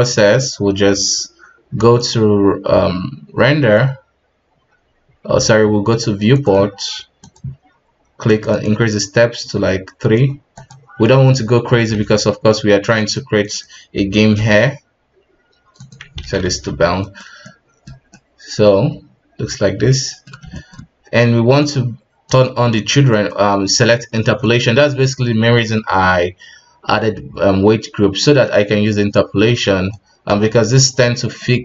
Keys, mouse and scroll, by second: 0.6-1.3 scroll down 7, 1.9-5.0 drag, 6.3-9.3 drag, 9.3 KP_1, 10.5-11.0 drag, 11.0 middle click, 11.4-11.9 scroll up 3, 11.9 alt+a, 12.9 right click, 14.3 F7, 16.2 alt+a, 16.4 KP_1, 17.0-17.3 right drag, 17.4-21.5 middle drag, 21.5-22.4 drag, 22.8-26.5 middle drag, 26.5-27.7 scroll down 9, 28.2-30.1 middle drag, 30.1 scroll up 1, 31.3-31.6 middle drag.